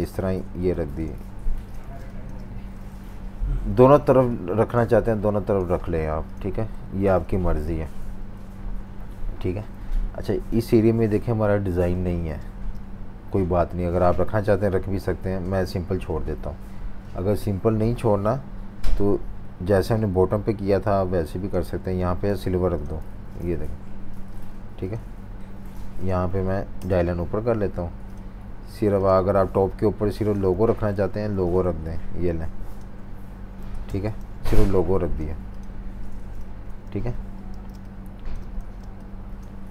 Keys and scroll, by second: 7.0 super+s, 12.0 v, 12.4 space, 18.2 m, 21.8 v, 22.2 i, 23.0 v, 29.4 super+3, 30.5 super+3, 34.2 shift+super+v, 36.6 super+-, 36.8 super+-, 37.5-39.3 typing.